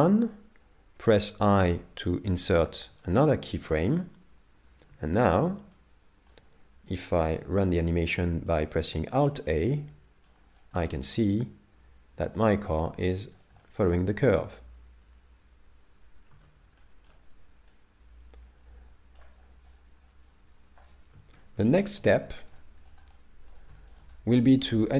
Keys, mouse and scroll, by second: 1.7 i, 3.0 shift+middle click, 4.9 alt+a, 5.8 shift+middle click, 6.9 middle click, 9.5 middle click, 10.6-10.9 scroll up 3, 13.1 middle click, 13.6 shift+middle click, 16.4 alt+a, 16.8 shift+middle click, 17.8 click, 21.3 shift+Left, 22.2 shift+middle click, 22.9 scroll up 2, 23.1 middle click, 23.8 shift+middle click, 24.3 middle click, 24.9 scroll up 3.